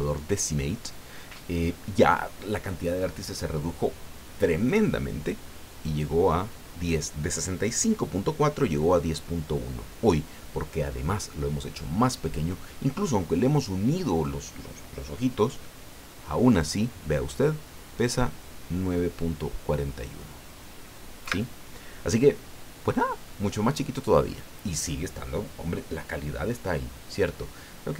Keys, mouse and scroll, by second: 21.2 Escape.